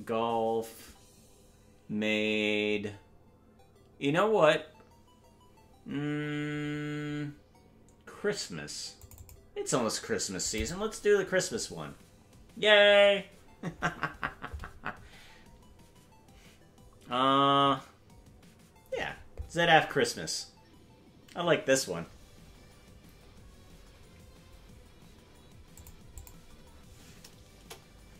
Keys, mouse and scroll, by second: 27.5 KP_0.